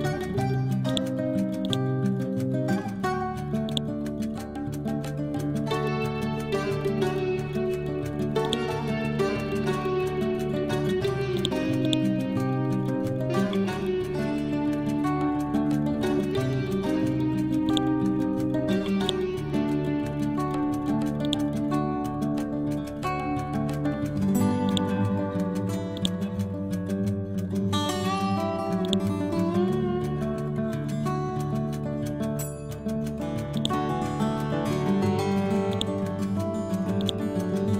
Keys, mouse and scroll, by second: 0.4 scroll down 1, 0.9 click, 2.2 scroll up 1, 3.7 ctrl+click, 5.0 scroll down 1, 7.3-7.8 scroll up 1, 8.5-9.9 ctrl+drag, 9.9 scroll down 1, 11.4 click, 13.7 scroll down 1, 15.9-16.6 scroll up 1, 20.4 scroll up 1, 21.3 click, 22.2-23.3 scroll down 1, 24.7 click, 26.0 ctrl+click, 27.1-27.9 scroll down 1, 27.9 scroll up 1, 28.9 ctrl+click, 29.8 scroll down 1, 31.9-32.6 scroll up 1, 33.6 ctrl+click, 34.6 scroll down 1, 35.8-37.7 drag.